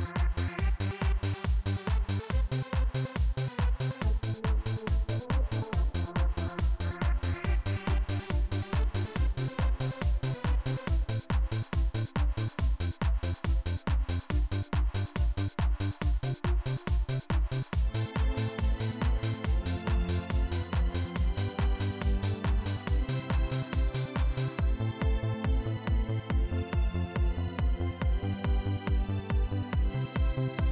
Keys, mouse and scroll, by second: 0.4 right click, 5.5 click, 7.5 click, 10.0 click, 13.8 click, 20.8-23.4 drag, 24.3 click, 27.9 click, 28.6-29.9 scroll up 1, 29.9 click.